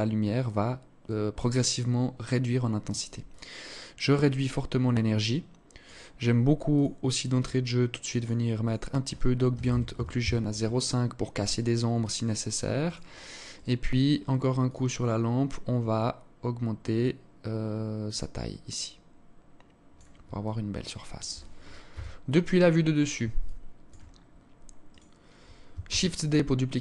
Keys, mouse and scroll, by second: 2.7 click, 6.2 click, 7.7 click, 8.1 click, 12.3 right click, 13.0 right click, 14.1 click, 15.3-15.9 scroll down 2, 17.6 click, 19.9 alt+click, 21.4 KP_7, 22.9 alt+shift+click, 23.6-24.4 scroll down 1, 24.4 right click, 24.4 scroll down 1, 25.3 shift+d.